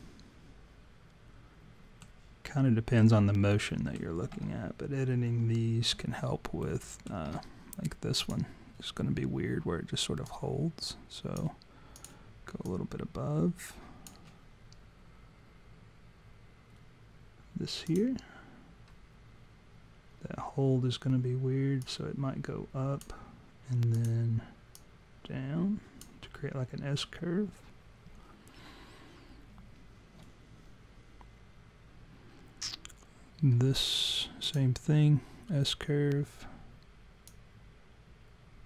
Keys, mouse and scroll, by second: 0.0 alt+middle click, 3.7 alt+middle click, 6.6 alt+middle click, 8.2 click, 10.3 click, 11.9 click, 12.7 click, 17.9 click, 21.8 click, 23.9 click, 24.8 click, 34.5 click, 37.3 click.